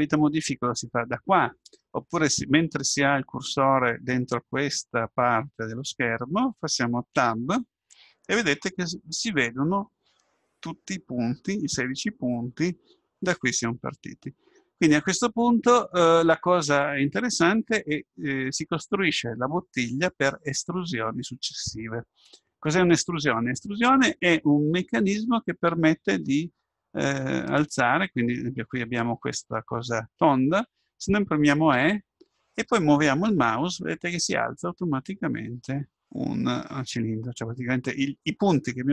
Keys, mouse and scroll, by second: 7.2 Tab, 31.8 e.